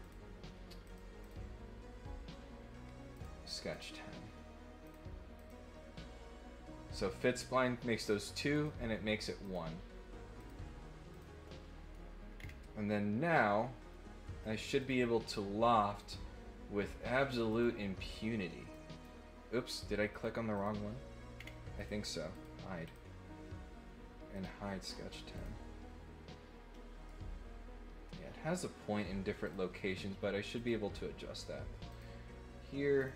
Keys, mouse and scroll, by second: 0.0 click, 0.8 click, 1.2 click, 3.1 click, 3.7 click, 4.8 click, 5.3 click, 8.5 click, 9.4 click, 10.3 click, 11.1 click, 11.4 middle click, 12.3 middle click, 14.7 click, 15.9 click, 17.5 click, 18.7 click, 20.1 click, 20.5 click, 21.3 middle click, 21.7 click, 22.3 click, 22.8 click, 24.3 click, 24.8 click, 25.3 click, 26.7 middle click, 29.4 click, 30.5 click, 31.9 click, 32.9 click.